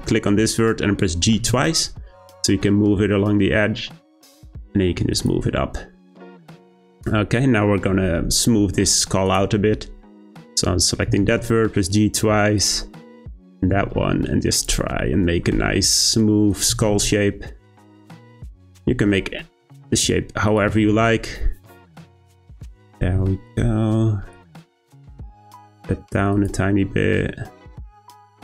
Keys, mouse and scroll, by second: 1.3 g, 5.7-7.6 scroll down 2, 7.6-9.2 scroll down 1, 9.2 click, 10.1-11.1 scroll up 1, 11.1 g, 13.3 click, 13.6 g, 15.1-16.5 shift+middle drag, 16.5 click, 16.7 g, 18.4 click, 18.6 g, 20.5 click, 20.6 g, 22.6 click, 22.8 g, 24.3 click, 24.6 g, 28.1 click.